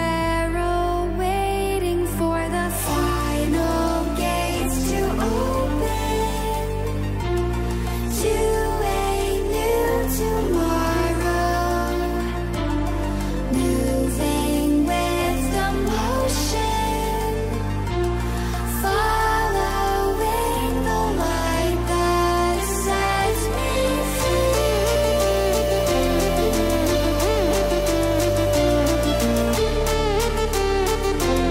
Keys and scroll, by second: 26.3 ctrl+j, 27.2 ctrl+j, 29.0 ctrl+alt+j.